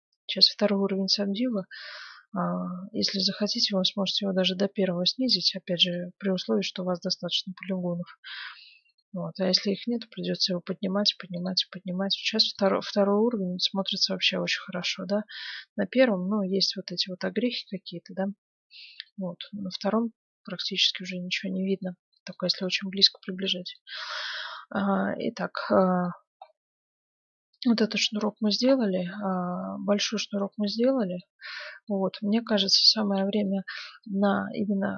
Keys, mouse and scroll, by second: 1.5-3.2 drag, 2.6-5.7 middle drag, 5.8-7.6 drag, 8.8-11.2 drag, 11.3-14.3 drag, 13.3-15.1 middle drag, 15.3-17.1 drag, 18.9-20.6 drag, 19.7-34.9 middle drag.